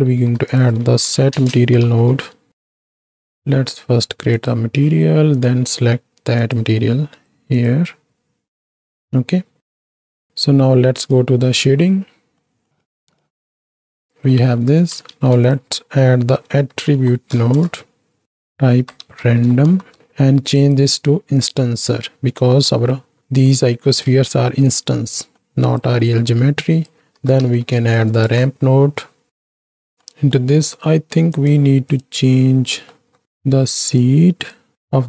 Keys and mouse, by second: 0.2 shift+a, 3.4 drag, 4.4 click, 5.4 click, 6.7-8.1 drag, 8.8 middle click, 9.9 ctrl+space, 11.0 click, 12.4 middle click, 12.8 shift+middle drag, 13.0 z, 13.8 middle click, 14.3 middle click, 15.1 shift+a, 16.9 t, 18.2-20.0 drag, 20.6-21.6 drag, 22.8 middle click, 23.5 middle click, 24.2 shift+middle click, 25.2 middle click, 25.5 click, 26.1 middle click, 26.6-29.5 drag, 29.6 right click, 30.1 middle click, 31.3 click, 32.8 middle click, 34.0 click.